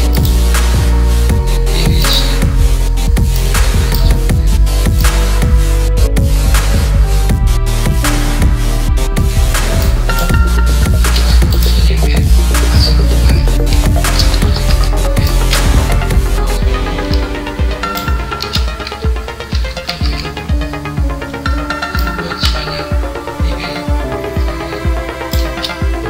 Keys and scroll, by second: 14.0 ctrl+c, 15.5 ctrl+v, 19.8 ctrl+c.